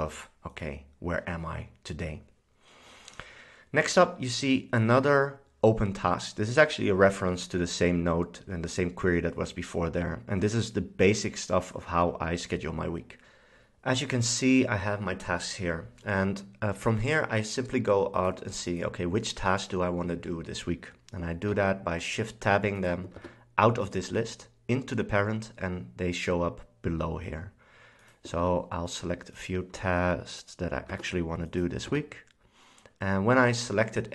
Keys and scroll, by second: 21.6 shift+Tab, 23.3 shift+Tab, 28.5 shift+Tab, 29.9 shift+Tab, 31.0 shift+Tab, 32.0 shift+Tab.